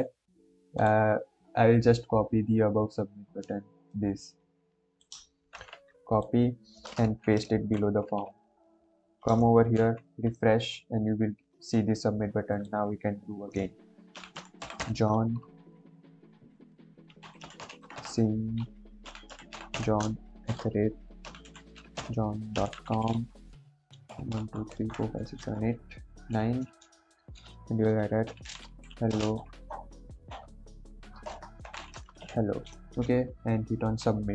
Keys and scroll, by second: 5.5 ctrl+c, 7.0 ctrl+v, 7.4 ctrl+s.